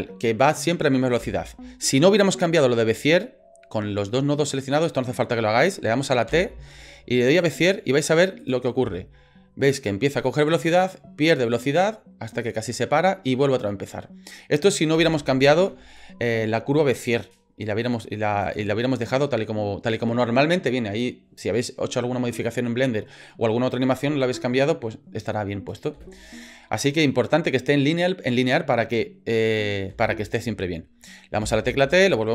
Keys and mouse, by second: 1.2 space, 6.3 t, 8.4 click, 8.8 space, 15.0 space, 15.7 ctrl+z, 18.4 click, 25.9 space, 29.9 space, 31.4 t.